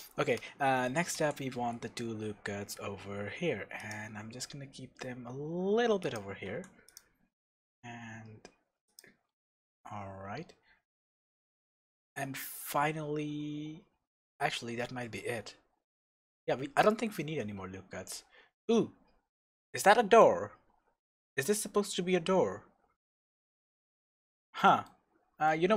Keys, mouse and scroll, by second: 0.0-1.1 scroll up 1, 1.1 ctrl+r, 6.1 click, 6.5 ctrl+r, 9.0 click, 9.3-9.9 scroll down 1, 9.9 Tab, 10.4 scroll up 1, 10.6 Tab, 12.4-13.5 scroll down 1, 19.0-19.3 scroll up 1, 19.7-25.7 shift+middle drag, 23.4-24.0 scroll down 2, 24.0 Tab, 24.4 scroll up 2, 24.9-25.5 scroll down 2.